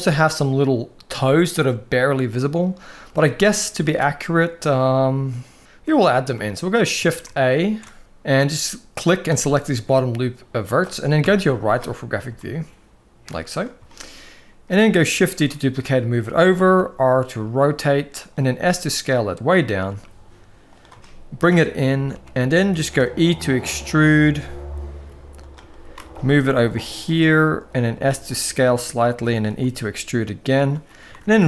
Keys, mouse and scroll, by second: 3.0 shift+middle drag, 3.5 alt+a, 5.7 middle click, 6.2-6.5 shift+middle drag, 10.9 KP_3, 12.1 shift+middle click, 13.6 shift+middle click, 15.0 shift+d, 16.5 r, 18.3 s, 19.6 g, 20.8-21.2 shift+middle drag, 21.9 g, 22.7 e, 25.4-25.8 shift+middle drag, 25.9 g, 27.7 s, 29.2 e, 30.9 ctrl+r.